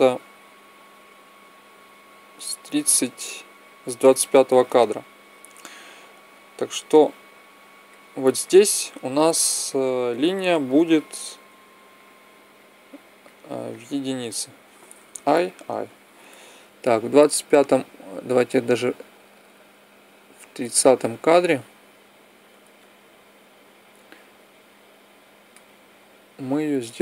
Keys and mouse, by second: 6.1-8.0 drag, 10.4-13.3 drag, 14.9 i, 15.3 i, 22.5-24.4 drag.